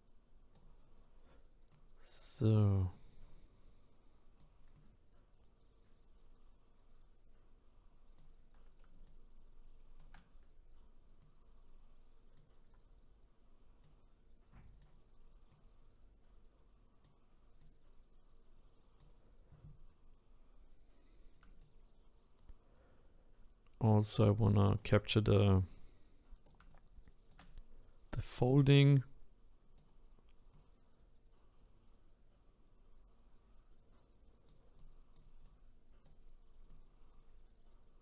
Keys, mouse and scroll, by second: 1.7-4.7 drag, 7.7-9.0 drag, 9.0-11.2 shift+right drag, 11.2-13.8 drag, 13.8-15.5 right drag, 15.5-20.4 drag, 20.4-21.3 scroll down 1, 21.6-24.7 shift+right drag, 25.0-30.5 right drag, 30.5-33.5 drag, 34.8 click, 35.4-36.7 right drag, 36.7-38.0 drag.